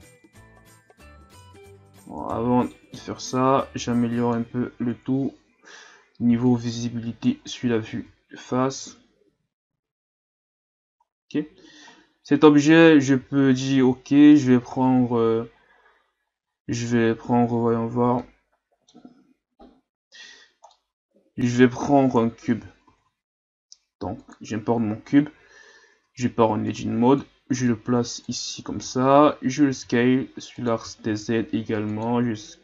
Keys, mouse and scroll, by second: 0.1-2.2 drag, 2.2 alt+right click, 2.7 middle click, 3.4-4.9 drag, 4.9 KP_1, 6.5-7.5 drag, 7.5-8.0 scroll down 5, 8.0 Tab, 8.4 a, 8.8 a, 9.8-10.8 ctrl+scroll down 4, 11.0-11.8 scroll down 1, 11.8-12.6 scroll down 6, 12.6-15.7 scroll up 5, 18.2-20.3 middle drag, 20.3-20.7 scroll up 2, 20.7-22.1 middle drag, 22.1 KP_1, 22.9 shift+a, 25.1-25.9 scroll down 5, 25.9 Tab, 26.7-28.5 drag, 28.5-28.9 scroll up 3, 29.7 s, 30.9 s.